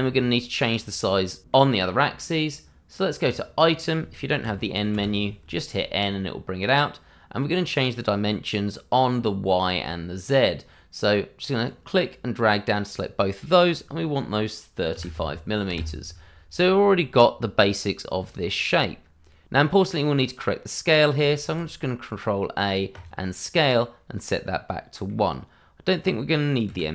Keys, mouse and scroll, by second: 0.1 middle click, 3.2 click, 4.4 n, 11.6 click, 14.9 3, 15.1 5, 15.7 KP_Enter, 21.4 ctrl+a, 22.9 click, 24.2 middle click, 26.6 n.